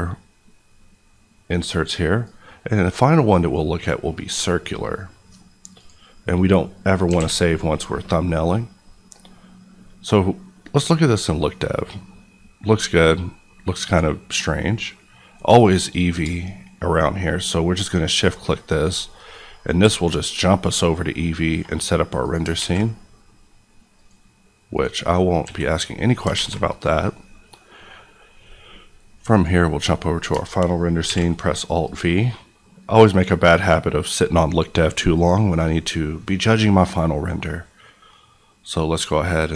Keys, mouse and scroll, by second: 6.6 middle click, 6.9 scroll up 1, 7.1 alt+a, 7.4 scroll down 1, 7.7 middle click, 10.6 click, 11.2 middle click, 13.8 click, 17.7 shift+click, 19.4-19.7 scroll up 1, 19.8 s, 22.2 click, 22.5 alt+a, 23.9 click, 25.4 s, 26.1 click, 26.3 alt+a, 29.3 click, 31.0 alt+v, 31.9 click.